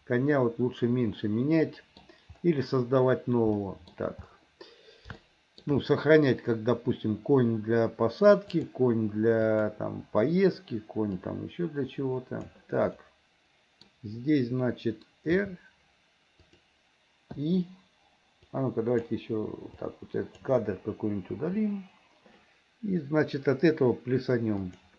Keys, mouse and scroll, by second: 3.6 middle click, 5.3 shift+middle click, 8.5 click, 9.4 click, 11.3-12.6 drag, 13.0 middle click, 15.4 r, 17.5 i, 18.5 click, 19.8 click, 21.4 Delete, 24.7 click.